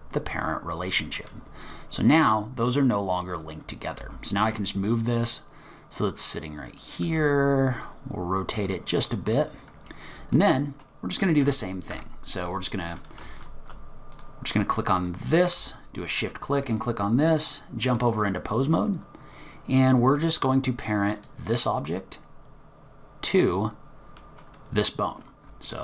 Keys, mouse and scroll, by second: 3.3 click, 4.0 g, 7.4 r, 10.3 middle click, 11.1 click, 11.4 Tab, 11.9 Tab, 12.5 click, 13.4 shift+click, 14.1 click, 15.0 click, 16.1 shift+click, 17.3 click, 21.2 click.